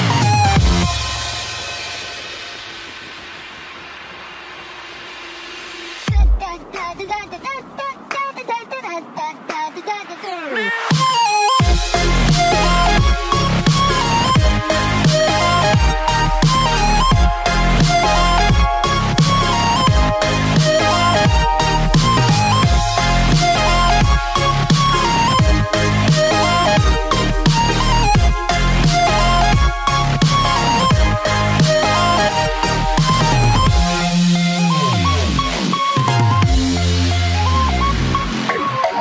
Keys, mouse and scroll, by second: 3.0 click, 4.1 click, 6.7 click, 7.4 click, 10.9 click, 12.4 scroll up 3, 16.1 ctrl+click, 16.9 ctrl+click, 18.9 right click, 18.9 click, 20.0 click, 22.7 click, 23.7 click, 26.5 click, 31.3 click, 32.8 click, 34.4 click, 37.4 click.